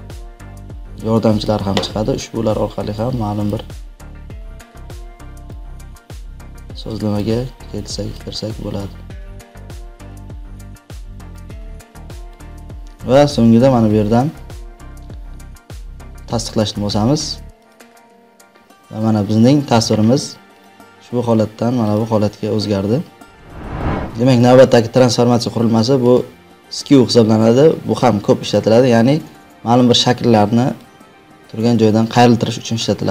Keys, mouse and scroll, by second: 3.4 click, 5.9 click, 8.3 click, 12.2 click, 20.2 click, 21.9 click, 24.3 ctrl+t, 26.0 right click, 28.5 click, 30.9 click.